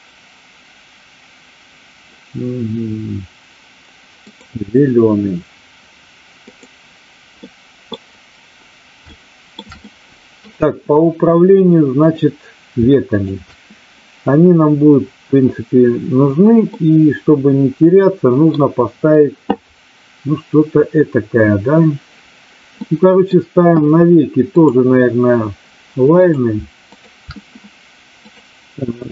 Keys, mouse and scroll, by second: 6.3 click, 7.3-7.9 middle drag, 9.1-9.6 shift+middle drag, 9.7-10.5 middle drag, 13.1 shift+click, 16.7-18.6 middle drag, 22.7-23.3 middle drag, 26.1 click, 26.9 shift+click, 28.3-29.1 drag.